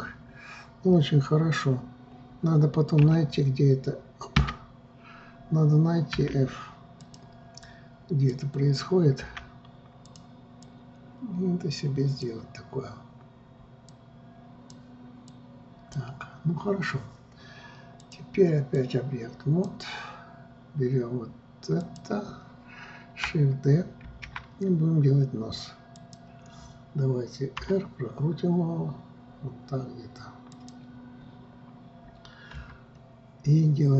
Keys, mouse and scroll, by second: 3.7 s, 8.3-9.8 drag, 9.8 f, 11.2-14.2 drag, 14.5-21.6 drag, 22.4 click, 24.6 shift+d, 28.2 r, 33.1 KP_3.